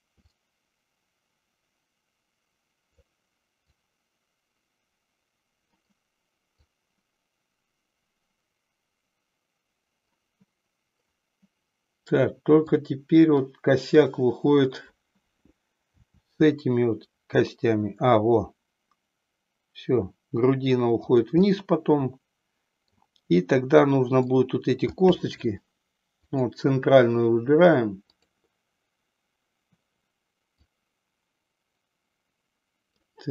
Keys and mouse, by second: 0.2-3.1 drag, 3.7-5.8 drag, 6.6-10.2 drag, 12.9-13.5 drag, 15.9 r, 21.6-23.0 middle drag, 23.8 click, 25.1 middle click, 26.2 click, 28.1-28.8 drag, 30.8-33.2 drag.